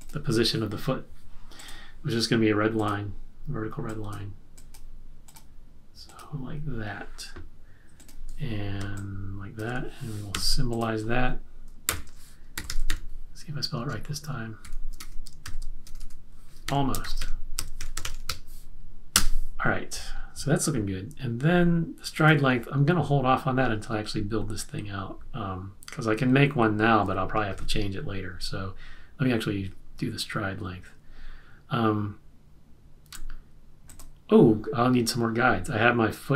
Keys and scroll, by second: 10.3 v, 11.8-13.3 typing, 11.9 F8, 14.7-18.7 typing, 19.1 Return.